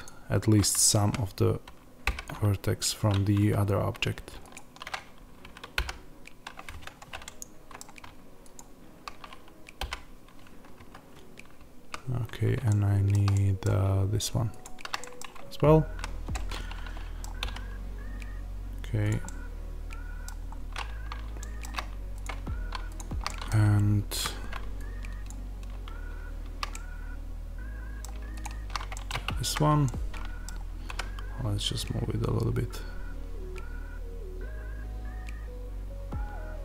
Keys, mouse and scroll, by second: 1.0 z, 2.0 g, 3.4 Escape, 4.4 shift+click, 5.7 g, 6.8 Escape, 7.2-8.5 middle drag, 8.5 shift+click, 9.7 g, 10.8 Escape, 11.8 z, 12.1-12.6 scroll up 2, 12.6-14.5 shift+middle drag, 14.5 shift+click, 14.9-19.0 middle drag, 15.1-15.6 scroll down 2, 15.6 z, 17.1 scroll down 2, 17.3 g, 19.0 click, 19.1-22.1 middle drag, 20.4 scroll up 1, 22.1 click, 23.2-25.2 middle drag, 23.5 z, 25.2 click, 26.6-28.3 middle drag, 28.3 shift+click, 28.9-36.6 middle drag, 29.2 z, 30.4-30.8 scroll down 1, 30.8 g.